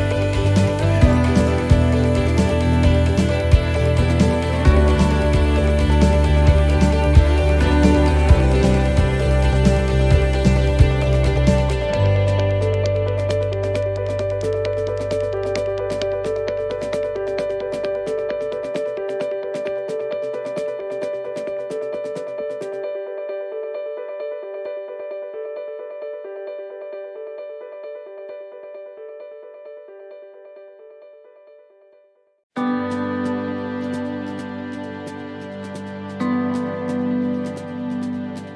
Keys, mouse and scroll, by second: 4.5 middle click, 5.1 shift+middle click, 5.7 middle click, 6.7 middle click, 6.8 shift+middle click, 7.2 shift+middle click, 7.8 scroll up 1, 8.2 middle click, 9.3 shift+middle click, 9.9 middle click, 11.8 click, 16.9 middle click, 18.3 shift+middle click, 18.9 middle click, 20.3 scroll down 1, 20.6 middle click, 21.5 middle click, 21.5-22.1 scroll down 1, 22.1 shift+middle click, 22.5-23.5 scroll up 9, 23.6 middle click, 24.1 scroll down 1, 24.5 middle click, 24.8 shift+middle click, 25.6 middle click, 26.0 scroll down 3, 26.7 shift+middle click, 26.7 scroll down 4, 27.3-27.8 scroll up 9, 29.7 middle click, 30.2-30.7 scroll down 9, 30.8 shift+middle click, 31.6-32.2 scroll up 2, 32.2 scroll up 6, 32.2 middle click, 33.3 shift+middle click, 35.7 shift+middle click, 38.0-38.5 scroll down 12.